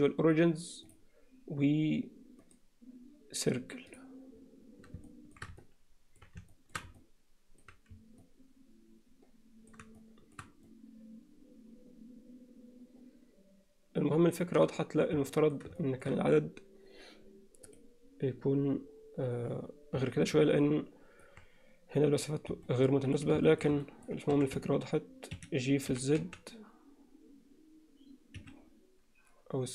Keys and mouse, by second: 2.5-4.0 right drag, 5.1 alt+shift+middle click, 5.6 middle click, 6.5 shift+middle click, 7.0 alt+middle click, 8.3-9.7 middle drag, 10.0 alt+shift+middle click, 10.7-14.6 alt+middle drag, 15.3 alt+middle click, 15.8 alt+shift+middle click, 20.7 middle click, 22.7 middle click, 23.5 shift+middle click, 23.9 middle click, 24.3 e, 25.9 g.